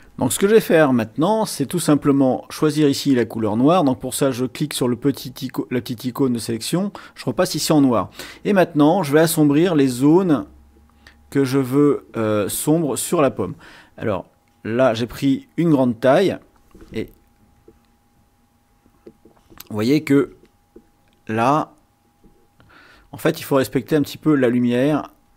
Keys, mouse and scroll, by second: 4.8-6.3 drag, 10.0-11.1 drag, 11.3-12.6 drag, 16.3 click, 17.5 click, 18.8 click, 21.3-22.4 drag, 23.1 click, 24.2 click, 25.2 click.